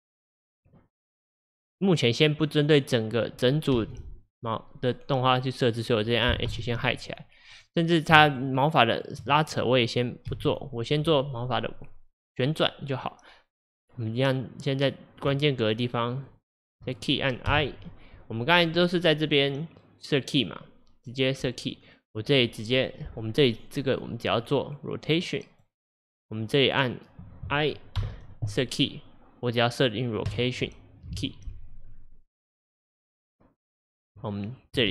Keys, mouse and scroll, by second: 3.8 g, 6.5 h, 7.6 click, 8.3 shift+click, 9.0 shift+click, 10.4 h, 11.0 click, 14.2-15.5 drag, 16.3 shift+click, 17.5 i, 19.5 click, 24.1-28.0 drag, 28.0 i, 29.2 click, 32.6 click.